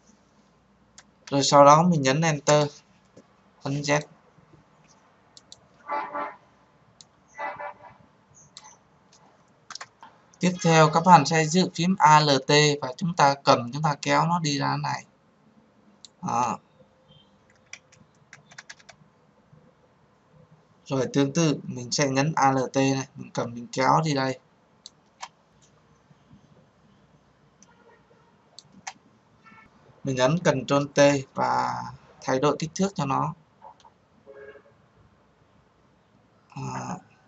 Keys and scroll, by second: 2.4 Return, 30.9 ctrl+t.